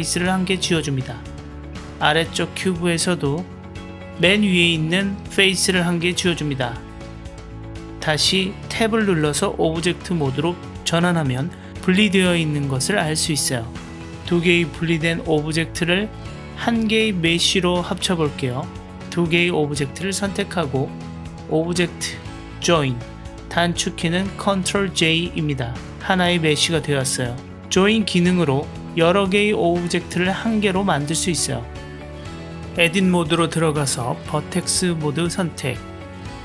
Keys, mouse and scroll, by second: 1.8-2.6 middle drag, 4.0 Delete, 6.3-7.1 middle drag, 8.0 Tab, 9.1 drag, 9.7 click, 10.3 click, 10.8 click, 11.3 drag, 12.0-13.0 middle drag, 13.3-13.8 drag, 18.2 click, 21.3-24.4 drag, 24.5 ctrl+j, 26.4 ctrl+click, 27.2-27.6 ctrl+drag, 28.5-30.0 middle drag, 32.4 Tab, 35.1 click, 35.9-36.4 middle drag.